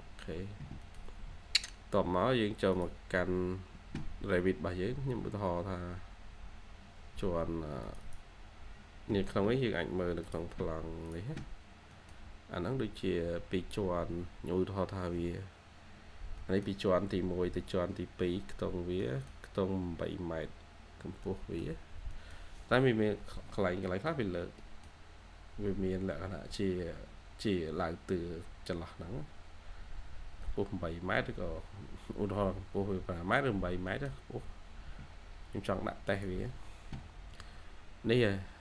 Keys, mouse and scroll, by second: 0.5 scroll up 1, 0.7 middle click, 1.0-2.0 scroll down 1, 3.8-4.8 scroll down 1, 7.9 double click, 11.8 middle click, 12.1 scroll down 1, 12.8-13.8 scroll up 1, 16.3 middle click, 16.8-17.5 scroll down 1, 17.5-18.1 scroll up 1, 18.9 middle click, 20.6 scroll down 1, 21.1 middle click, 22.9 scroll up 1, 23.3-23.7 scroll down 1, 23.7 middle click, 25.2 scroll up 1, 27.8 scroll down 1, 28.9-29.2 scroll up 1, 30.1-30.8 scroll down 1, 30.8-31.7 scroll up 1, 33.5 scroll down 1, 33.8 middle click, 36.9-37.7 scroll down 1.